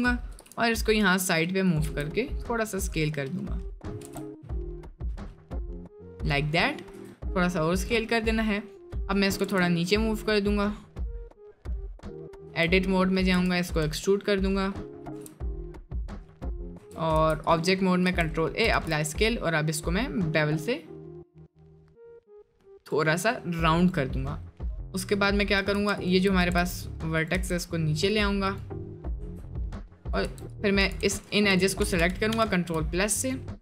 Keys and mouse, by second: 0.3 g, 1.9 s, 4.0 g, 6.9 s, 8.5 click, 9.4 g, 12.5 Tab, 13.4 e, 15.0 g, 16.8 Tab, 17.3 ctrl+a, 17.8 middle click, 18.1 Tab, 18.8 ctrl+b, 22.9 click, 25.6 1, 26.0 alt+click, 26.4 g, 27.4 Tab, 28.2 click, 28.5 click, 29.2 1, 29.6 click, 30.0 click, 30.3 Tab, 30.5 click, 30.8 2, 31.0 3, 31.8 ctrl+KP_Add.